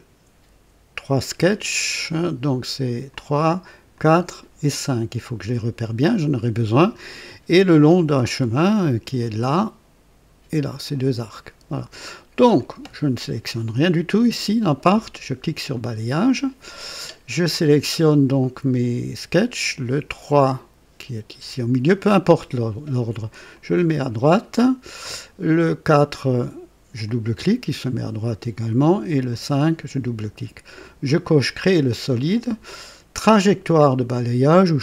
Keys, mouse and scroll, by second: 3.1 click, 3.9 click, 5.5 click, 12.3 click, 15.7 click, 19.6 click, 23.5 click, 25.6 click, 27.0 click, 29.1 click, 31.2 click.